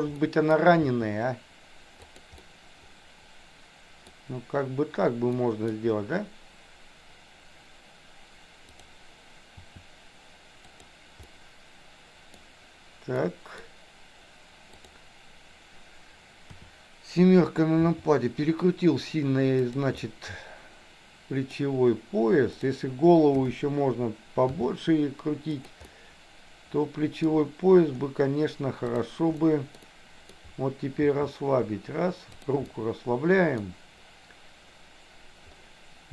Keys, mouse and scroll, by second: 0.2 middle click, 0.9 r, 2.5-4.1 middle drag, 4.1 scroll down 1, 5.3 middle click, 5.7 scroll down 1, 8.9 click, 9.6 r, 11.3-12.4 middle drag, 13.2 middle click, 13.6 scroll down 1, 14.8 click, 16.5 KP_7, 17.8 r, 20.1-21.6 middle drag, 22.5 click, 23.3 KP_7, 24.3 r, 25.9-27.4 middle drag, 28.8 click, 29.3 middle click, 29.8 middle click, 31.0 r, 32.6-33.6 middle drag.